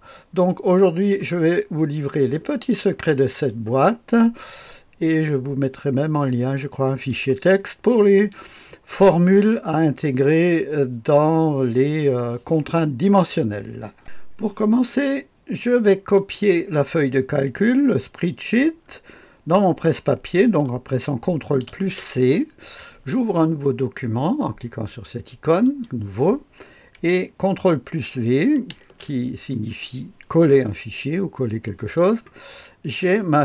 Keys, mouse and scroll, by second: 2.8-3.8 right drag, 4.5-7.1 drag, 14.0 click, 16.1 click, 21.7 ctrl+c, 25.6 click, 28.7 ctrl+v.